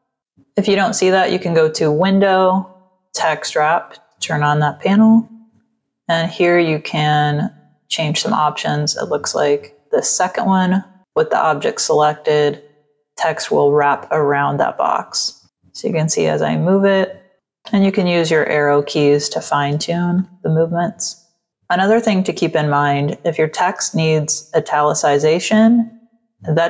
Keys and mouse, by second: 1.4 click, 6.5 click, 14.8 click, 15.3 click, 15.8 click, 17.3 Up, 17.7 Up, 18.5 Right, 18.9 Down, 19.2 Left, 20.1 w, 20.7 click, 21.3 space, 21.5 click, 22.0 click, 24.6 t, 25.0 click.